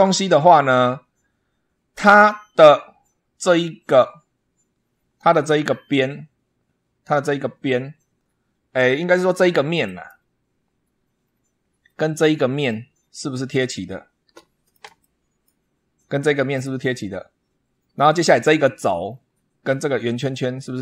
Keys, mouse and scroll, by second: 0.5 super+scroll up 2, 1.6 scroll down 2, 2.1-3.5 drag, 3.6-4.0 scroll up 1, 9.7 click, 11.1-11.4 scroll down 1, 11.7-12.8 middle drag, 12.8 scroll down 1, 14.2 shift+middle click, 14.8 shift+middle click, 15.6 scroll up 2, 18.9-19.4 scroll down 2, 19.8-20.1 scroll up 2.